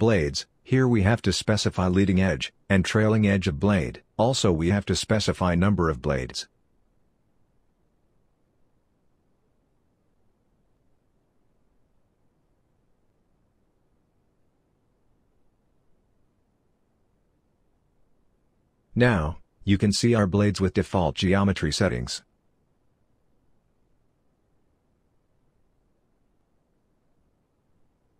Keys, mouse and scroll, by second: 19.1 right click, 19.2 middle click, 27.9 middle click.